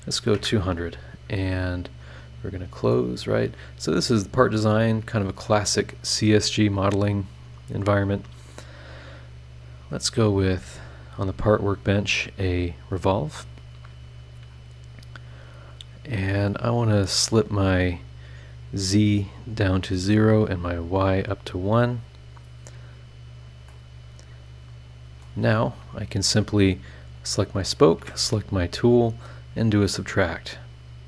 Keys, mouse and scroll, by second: 0.3 KP_Enter, 2.0 click, 2.5 scroll down 2, 2.9-4.2 middle drag, 3.0-4.2 drag, 4.2 scroll down 2, 4.7-6.1 middle drag, 4.7-6.1 drag, 6.5 scroll up 2, 10.6 click, 11.6 click, 12.9 click, 14.4 scroll down 2, 17.9 click, 20.8 click, 21.9 click, 23.7 middle click, 23.7 click, 23.7 right click, 24.3 right click, 24.6 scroll down 2, 24.8 middle click, 27.1 click, 27.8 ctrl+click, 30.6 click, 30.9-31.0 middle drag.